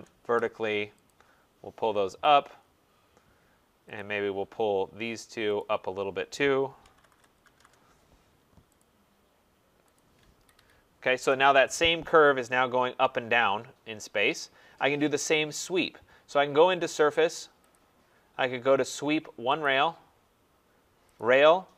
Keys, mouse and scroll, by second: 0.0-0.3 typing, 1.1 click, 2.2 click, 2.6 scroll, 4.0 click, 5.6 shift+click, 6.6-8.0 typing, 8.8 click, 9.9 click, 10.4 Escape, 10.5 Escape, 14.3 right click, 14.6 middle click, 14.7 middle click, 14.7 middle click, 14.8 middle click, 17.7 click, 19.6 click.